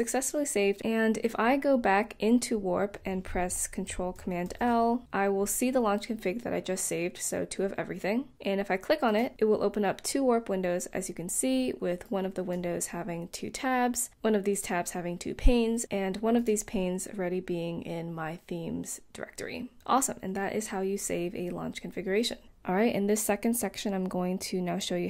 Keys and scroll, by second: 4.1 ctrl+super+l.